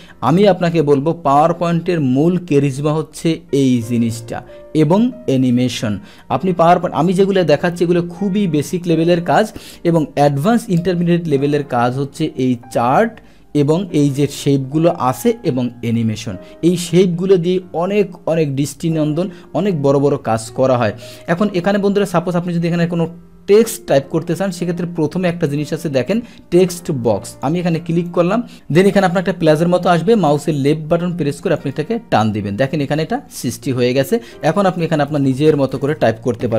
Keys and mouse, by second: 0.3 click, 3.6 click, 27.3 click, 28.1 click, 30.3-31.6 drag.